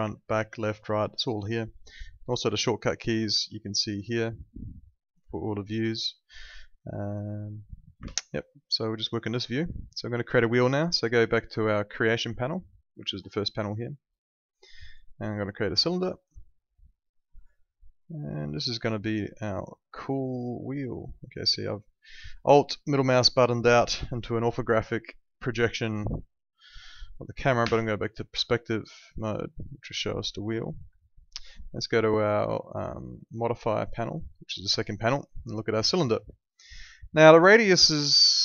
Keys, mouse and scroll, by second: 3.4 ctrl+2, 8.0 Escape, 9.1 middle click, 13.2 click, 15.8 click, 19.3 right click, 19.8 alt+middle click, 22.6 alt+middle click, 27.6 p, 28.6 alt+middle click, 30.6 alt+middle click, 33.7 click, 36.3 alt+middle click, 38.1 click.